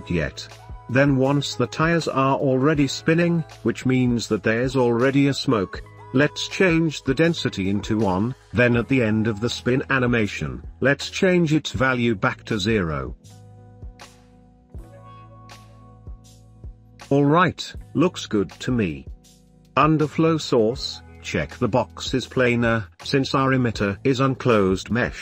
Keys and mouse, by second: 1.3 drag, 2.2-4.2 drag, 4.2 middle click, 4.9 click, 6.1 Right, 6.9 click, 7.6-8.8 drag, 10.1 click, 10.8-11.2 drag, 11.2 middle click, 12.0 shift+middle drag, 12.9 space, 16.4 space, 20.8-22.1 middle drag, 25.1-25.2 middle drag.